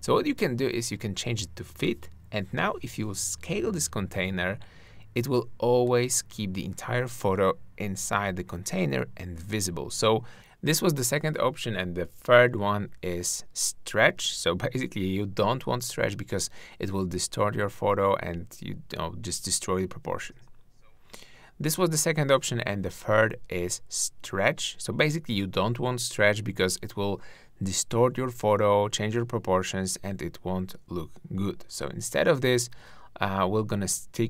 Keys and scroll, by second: 26.9 shift+`.